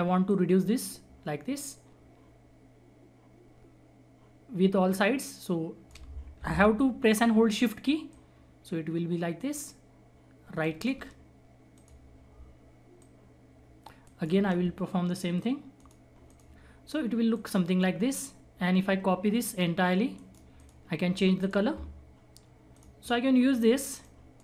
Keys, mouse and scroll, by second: 0.2-6.3 shift+drag, 6.3 ctrl+z, 8.0-10.6 shift+drag, 10.6 shift+right click, 11.7 click, 12.9 click, 14.0 shift+right click, 15.7 click, 16.6 scroll down 1, 17.3 click, 18.4-19.0 scroll up 1, 19.0-19.5 scroll down 1, 19.5 click, 20.1 right click, 20.5 click, 20.9-21.3 scroll up 1, 21.3 click, 23.2-23.8 scroll down 1, 23.8-24.4 drag.